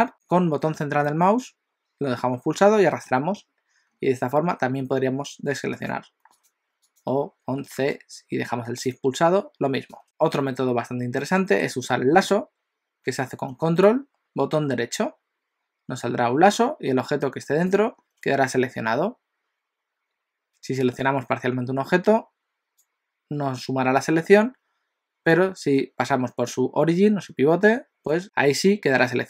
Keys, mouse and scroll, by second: 0.1 a, 0.1 c, 6.4 click, 6.9 shift+click, 7.5 c, 11.2-13.5 middle drag, 13.9 ctrl+right click, 20.8 ctrl+right click, 25.4 ctrl+right click.